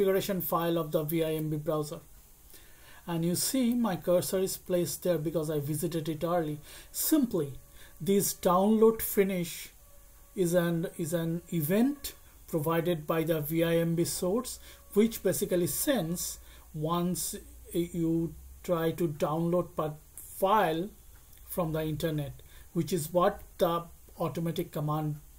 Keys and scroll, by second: 1.2 Return, 4.6 Left, 4.8 Left.